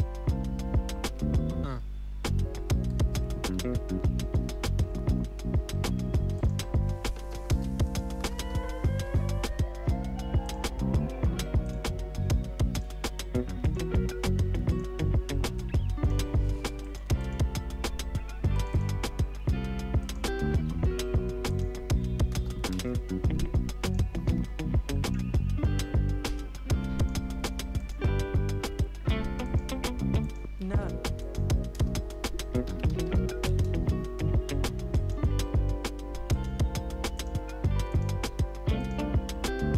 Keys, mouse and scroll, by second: 29.6-39.7 drag.